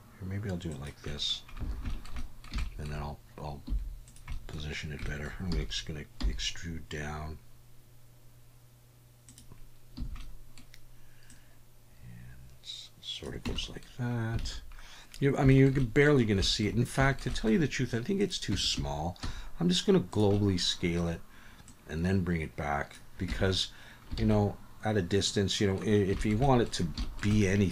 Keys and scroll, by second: 1.7 alt+a, 3.7 3, 6.2 e, 10.0 a, 13.4 Tab, 14.4 alt+a, 18.5 Tab, 18.8 a, 19.2 s, 23.3 Tab, 24.2 alt+a.